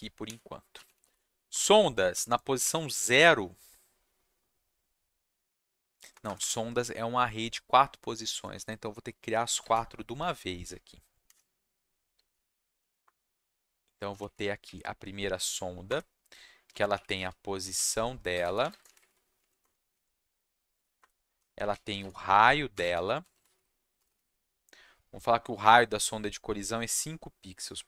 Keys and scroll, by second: 0.0-2.5 typing, 6.1 BackSpace, 6.2 BackSpace, 6.4 BackSpace, 11.2 =, 12.1 space, 12.3 shift+], 12.4 shift+\, 12.8 Left, 13.0 Return, 14.1 shift+], 14.2 shift+\, 14.6 Left, 15.8 Return, 16.4-18.9 typing, 19.4 Left, 19.6 Return, 19.9 Down, 20.7-24.0 typing, 21.0 Return, 26.8 5, 27.7 ,.